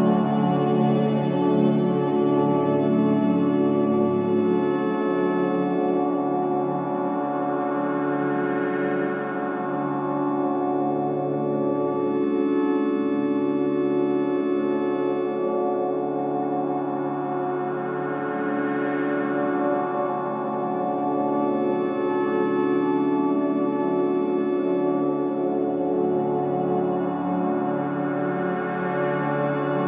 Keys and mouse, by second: 1.0 click, 2.2 r, 7.4 click, 9.3 click, 11.3 click, 13.2 click, 14.1-17.2 drag.